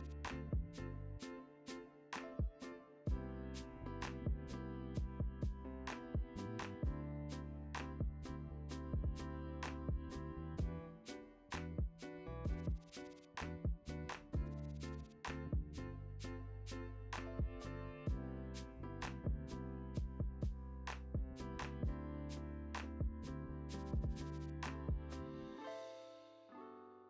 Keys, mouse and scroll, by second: 0.0 KP_3, 0.0 KP_1, 0.2-0.8 scroll up 1, 0.8 shift+d, 1.4 Tab, 1.6 scroll down 1, 1.9 Tab, 2.4 g, 3.1 click, 3.2 `, 3.4 g, 5.5 click, 6.2 g, 6.4 right click, 6.6 click, 6.8 `, 7.2 click, 7.8 ctrl+x, 7.8 Tab, 8.0 scroll down 1, 8.3 Tab, 8.5 click, 9.2 KP_Decimal, 9.4 scroll down 1, 9.8 click, 10.0 g, 10.4 click, 10.8 g, 12.6 click, 13.8 h, 14.0 ctrl+z, 14.3 g, 14.8 Tab, 15.0-15.6 scroll down 2, 15.0 a, 15.8 KP_0, 20.3 click, 20.8-23.0 typing, 21.5 scroll up 1, 21.6 Tab, 23.7 click, 23.9 Tab, 24.0 scroll down 1, 24.4 scroll up 1, 24.8 Tab, 25.0 click, 25.4 o, 25.9 click, 26.2 g, 26.6 click, 26.8 g.